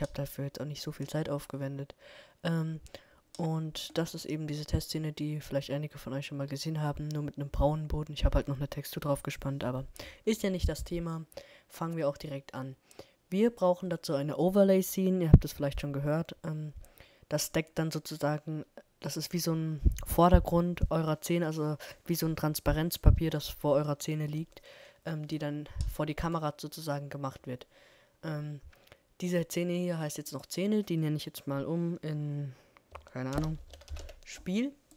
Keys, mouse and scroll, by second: 0.6-2.1 middle drag, 20.9-22.4 middle drag, 24.7-26.3 drag, 30.3-30.9 scroll up 1, 30.9-31.9 middle drag.